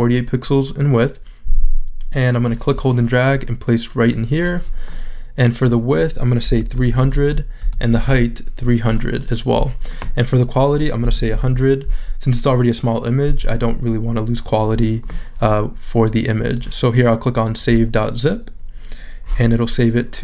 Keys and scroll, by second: 6.4-7.9 typing, 10.9-11.8 typing.